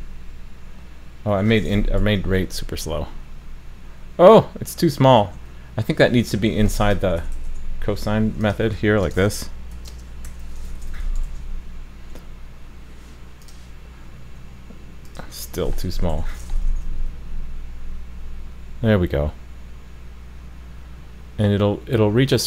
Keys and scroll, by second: 2.0 super+s, 5.3 super+z, 11.3 super+s, 16.7 super+s.